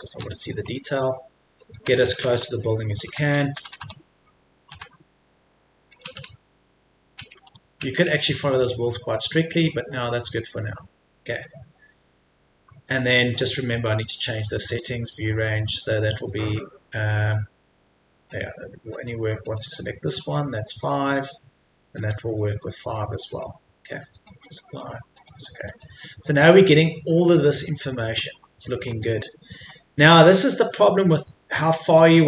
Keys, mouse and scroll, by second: 0.4 click, 0.7-1.2 scroll down 1, 1.2-1.6 scroll up 1, 1.6 click, 1.9 right click, 2.1 right click, 2.2 right click, 4.3 middle click, 4.7 click, 5.1-5.9 scroll down 1, 5.9 click, 6.1 scroll down 1, 6.7-8.6 scroll down 1, 8.6 click, 12.7 middle click, 13.7 click, 17.2-17.7 scroll up 1, 17.7-18.3 scroll down 1, 18.3 click, 26.3-26.7 scroll up 1, 27.9 middle click, 28.3-28.8 scroll up 1, 29.7 scroll down 1, 30.1 click, 30.8-31.3 scroll down 1, 31.3 Escape, 31.6 scroll up 1, 31.8 Escape.